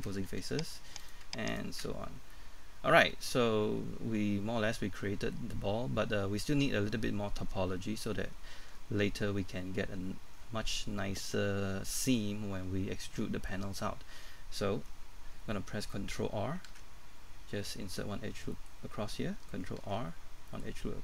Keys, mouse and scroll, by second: 1.0 right click, 1.5 shift+right click, 1.8 shift+f, 2.1 scroll down 1, 2.3 middle click, 18.5 middle click, 20.5 ctrl+r, 20.5 middle click.